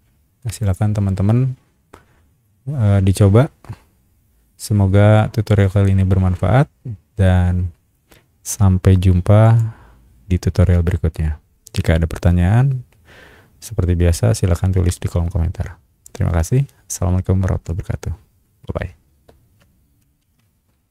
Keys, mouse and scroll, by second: 0.6 click, 9.4 click.